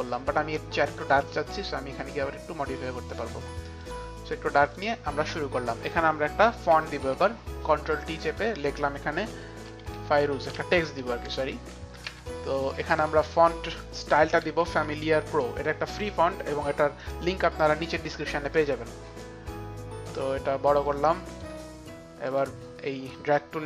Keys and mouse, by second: 0.7 ctrl+y, 0.7 click, 0.7 click, 2.0 click, 3.5 click, 3.7 click, 4.6 click, 6.9 ctrl+t, 6.9 click, 8.0 ctrl+t, 8.0 click, 8.2 click, 9.3-12.1 typing, 14.0-16.5 typing, 18.8 l, 19.9 click, 21.6 click, 22.2 click.